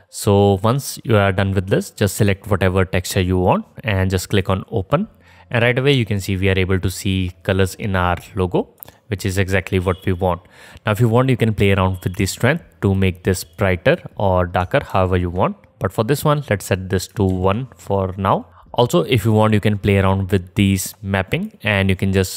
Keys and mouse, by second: 5.8-11.9 drag, 9.4 middle click, 9.4 right click, 11.9-18.5 middle drag, 15.1 ctrl+z, 17.5 ctrl+z, 18.5-22.3 drag, 21.0-22.3 middle drag, 21.0-22.3 right drag.